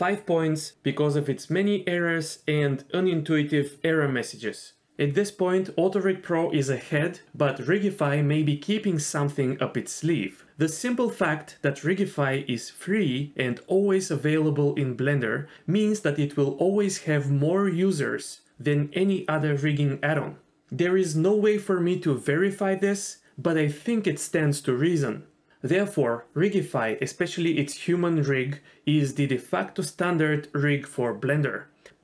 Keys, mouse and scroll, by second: 2.7-4.6 right drag, 12.0 click, 13.0 g, 16.6 middle click, 18.4 middle click, 19.3 Tab, 20.2 shift+click, 21.4 Tab, 26.2 click, 30.3 middle click.